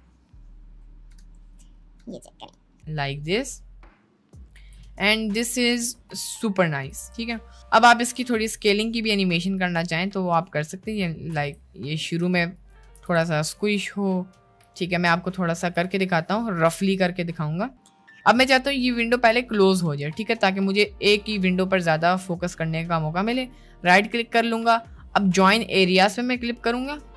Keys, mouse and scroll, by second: 1.3 space, 1.5 drag, 1.9 space, 4.5 space, 4.9 middle drag, 5.7 click, 6.9 click, 7.1 shift+middle click, 7.9 click, 9.7-11.1 drag, 11.4 s, 12.1 s, 12.9 s, 15.8-17.1 drag, 23.3-27.1 right drag.